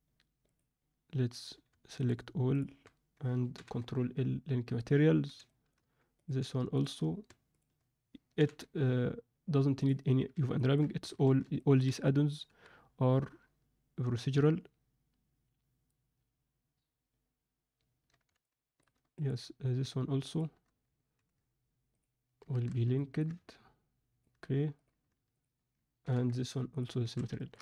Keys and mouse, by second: 0.4 click, 2.0 shift+drag, 2.5 shift+click, 3.5 ctrl+l, 5.4 shift+middle click, 6.1 click, 7.5 shift+click, 8.4 ctrl+l, 10.6 ctrl+middle click, 11.2 alt+a, 17.0 ctrl+middle click, 17.2 n, 18.4-18.9 alt+shift+middle drag, 19.2 click, 20.2 shift+click, 21.1 ctrl+l, 22.6 alt+a, 23.0 ctrl+alt+middle click, 23.4-24.2 middle drag, 26.0 ctrl+l, 27.2 alt+a, 27.3 alt+shift+middle click.